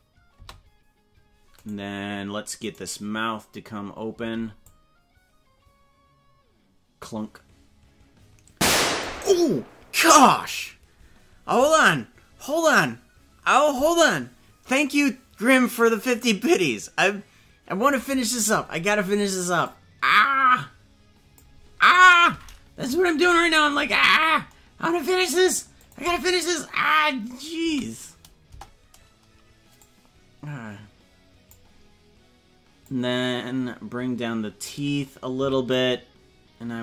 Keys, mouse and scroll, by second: 0.4 space, 2.0 right click, 3.1 right click, 4.6-9.0 drag, 19.6-21.3 drag, 22.8 KP_Decimal, 23.8-24.3 scroll down 11, 25.8 click, 26.0 space, 27.6 space, 28.4 KP_0, 29.8-31.5 drag, 32.9-34.7 drag, 35.3 c.